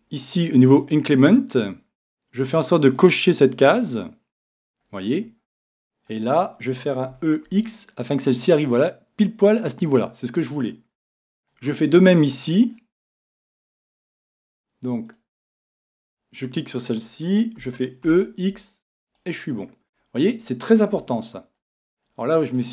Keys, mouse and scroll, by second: 3.0-6.1 drag, 5.4-8.0 middle drag, 8.4-10.0 drag, 10.0-14.7 middle drag, 14.7-15.1 scroll up 1, 15.1 middle click, 15.5-16.8 drag, 16.6-17.7 right drag, 17.6 e, 19.2-20.9 drag, 19.6 middle click, 20.7 middle click, 20.9 scroll down 1, 21.2-22.7 middle drag.